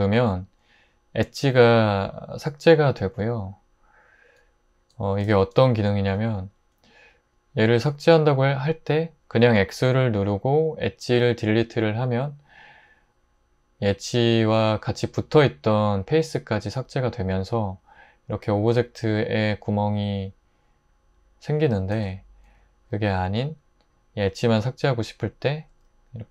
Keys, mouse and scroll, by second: 0.1 super+x, 5.3 super+z, 9.7 x, 22.0 super+z.